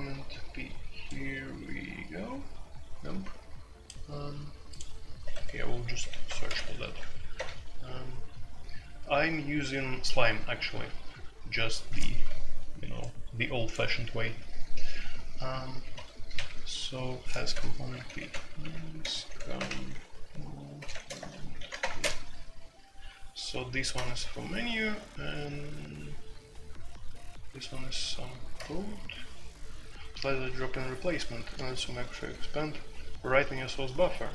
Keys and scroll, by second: 5.3 Escape, 5.9-7.3 typing, 15.9 Escape, 16.3 typing, 17.5-19.7 typing, 20.8-22.5 typing, 23.9 typing, 26.6 typing, 28.5 typing.